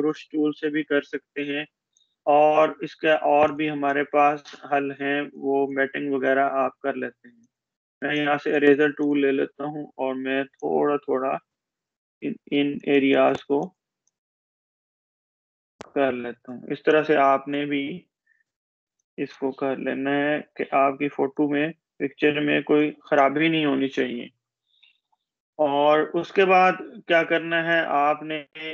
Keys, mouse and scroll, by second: 2.0-3.3 drag, 17.9-18.7 space, 18.8-21.0 drag, 22.8 space, 26.4 space, 27.3 click, 27.5-28.5 space.